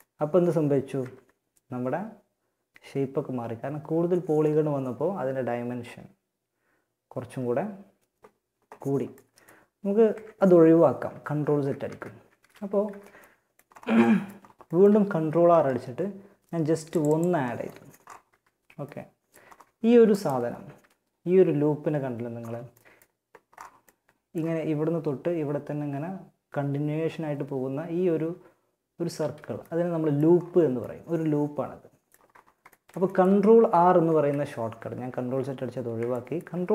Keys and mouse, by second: 0.2 Tab, 8.3-9.3 middle drag, 9.3 Tab, 10.6 ctrl+z, 11.0 ctrl+z, 11.6 a, 12.1 a, 14.4 ctrl+r, 17.4 a, 19.8 z, 21.6 middle click, 28.4 z, 32.6 ctrl+z, 33.2 ctrl+z, 33.7 ctrl+z.